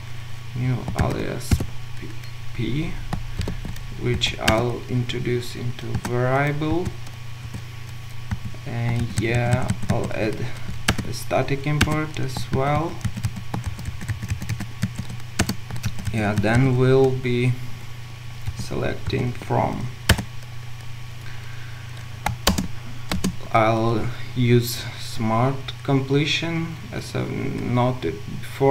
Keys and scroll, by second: 3.4 ctrl+shift+space, 7.4 ctrl+alt+super+v, 10.9 alt+Return, 20.1 Return, 22.5 Return, 22.5 ctrl+shift+space.